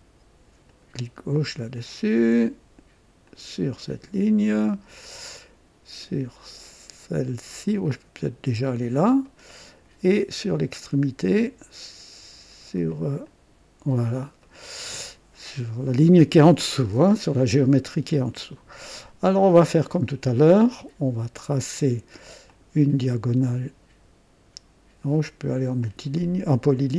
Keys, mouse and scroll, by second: 0.6 click, 1.4 right click, 3.2 click, 3.8 right click, 8.5 click, 9.2 right click, 13.2 click, 14.4 right click, 21.3 click, 22.5 click, 25.8 click.